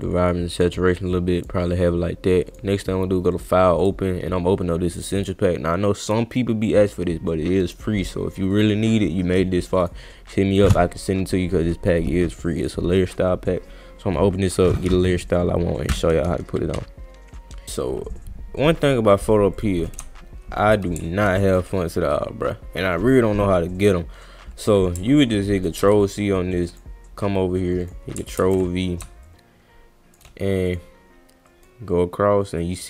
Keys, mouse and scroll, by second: 0.0 click, 1.4 click, 2.5 click, 3.3 click, 3.8 click, 5.2 click, 6.1 scroll down 1, 7.1-7.8 scroll up 1, 7.9 scroll down 1, 9.8 click, 18.8 click, 19.6 click, 25.8 ctrl+c, 26.7 click, 27.8 click, 28.4 ctrl+v, 29.3-30.1 shift+drag, 30.7 click, 31.5 click, 32.6 click.